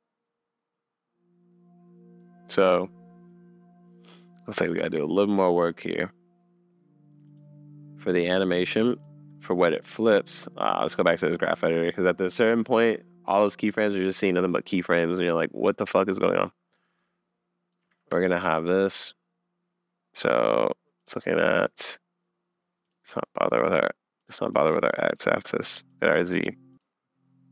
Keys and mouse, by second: 4.8 super+s, 6.0 click, 10.3 click, 17.0 click, 17.9 super+z, 20.2 click, 21.0 click, 21.4 click, 22.9 click, 23.7 click, 24.2 click, 25.7 click, 25.9 click, 26.7 click.